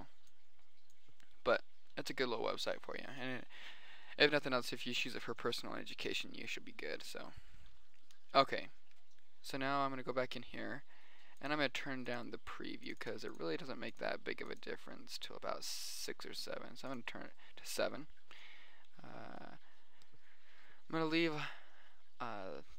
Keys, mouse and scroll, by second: 0.0 middle click, 1.8 middle click, 2.4-3.3 middle drag, 3.6-6.6 middle drag, 9.0-10.6 middle drag, 10.8-11.5 middle drag, 11.7-14.4 drag, 14.4-16.2 middle drag, 17.4-18.8 middle drag, 19.2 middle click, 21.0-21.6 middle drag, 22.2-22.7 middle drag.